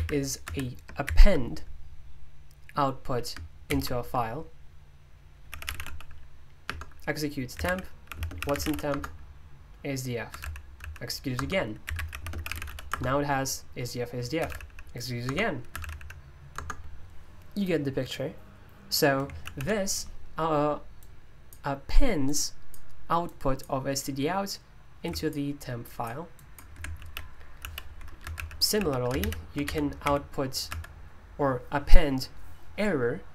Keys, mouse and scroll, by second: 0.4 Escape, 1.0 shift+c, 3.7 shift+., 5.4-17.2 typing, 6.6 Return, 14.4 Escape, 21.9-28.3 drag, 28.1-30.6 typing, 30.7 Escape.